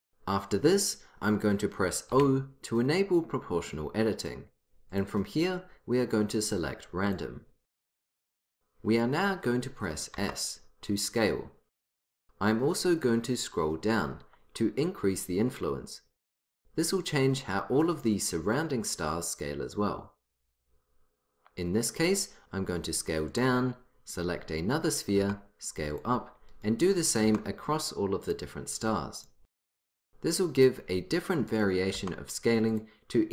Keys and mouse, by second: 2.2 o, 5.0-6.9 drag, 10.2 s, 24.7-28.5 drag, 25.2 s, 27.3 s, 29.2-30.8 drag, 29.7 s, 31.6 s, 32.6-33.3 drag, 33.2 s.